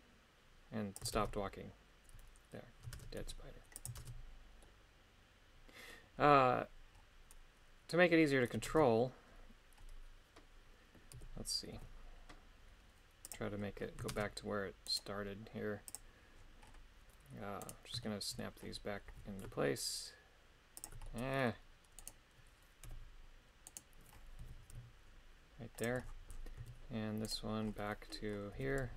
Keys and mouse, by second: 1.0 click, 1.1 shift+space, 2.9 shift+space, 3.2 g, 3.8 click, 4.0 shift+space, 4.6-5.9 middle drag, 8.7 shift+space, 11.2 KP_3, 11.7 g, 13.2 click, 14.1 shift+space, 14.9 right click, 15.9 click, 17.7 right click, 18.0 shift+middle click, 19.1 g, 20.8 ctrl+click, 21.0 middle click, 22.0 right click, 22.9 h, 23.7 right click, 24.4 g, 27.3 right click, 28.5 g.